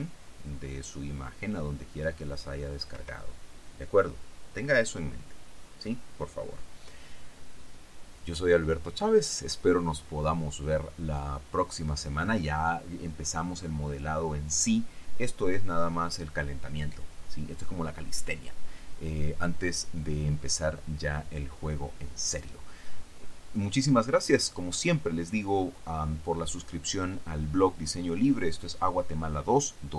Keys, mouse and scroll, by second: 3.1 Escape.